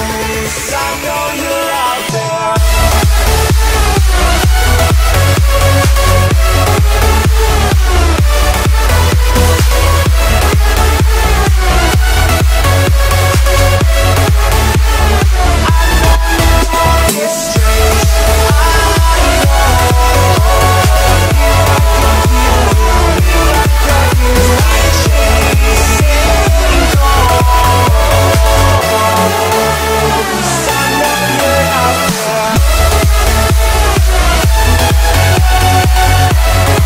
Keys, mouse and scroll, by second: 0.0-1.9 typing, 0.4 click, 0.8-1.2 scroll down 1, 2.4 click, 3.4 scroll down 1, 3.9 shift+middle click, 5.0 m, 5.1 click, 6.1 Left, 6.9 click, 7.0 space, 7.1-7.8 scroll up 1, 7.8 middle click, 8.9 c, 10.3 Left, 11.2 5, 11.5 Return, 11.9 space, 12.6 c, 14.0 Left, 15.1-18.6 typing, 19.0 click, 19.9 5, 20.3 Return, 20.6 space, 21.9 click, 24.3 space, 24.4-24.7 scroll down 1, 24.7-26.7 middle drag, 26.7-27.3 scroll up 1, 27.7 middle click, 28.6 ctrl+z, 29.6-30.2 scroll up 1, 30.2 c, 31.2 Left, 31.7 click, 32.4-33.8 typing, 34.3 click.